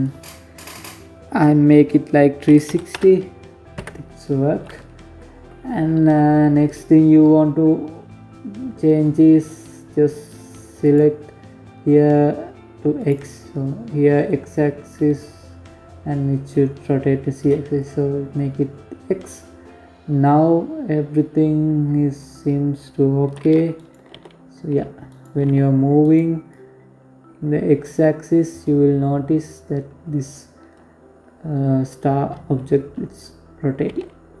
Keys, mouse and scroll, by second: 3.7-4.3 scroll down 1, 4.3-6.2 scroll down 1, 9.4 click, 18.2-21.5 scroll down 2, 22.3 right click, 22.7 g, 24.0 g, 25.0 click, 32.5 g.